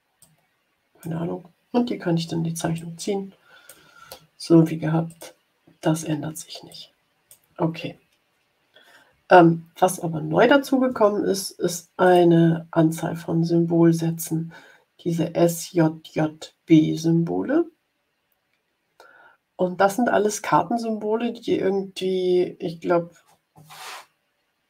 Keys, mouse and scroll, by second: 0.1-1.3 drag, 2.7-3.8 ctrl+drag, 5.0 click, 6.6 click, 9.7 Delete, 12.0 click, 17.8-18.4 scroll down 2, 18.9 scroll up 1.